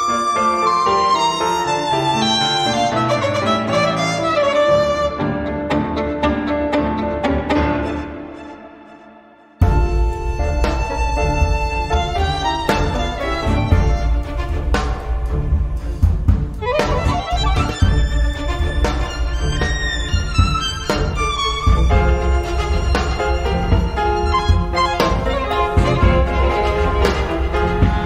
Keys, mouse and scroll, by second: 0.0-3.6 typing, 5.0 0, 6.3 click, 8.2 click, 9.0-10.4 drag, 11.4 click, 12.2 click, 14.3 click, 15.4-16.0 scroll up 1, 16.1-16.6 scroll down 2, 16.6-18.0 scroll up 6, 18.0-19.6 scroll down 10, 19.9 click, 21.0 click, 22.0-22.4 scroll down 2, 23.1-24.7 drag, 26.5 click.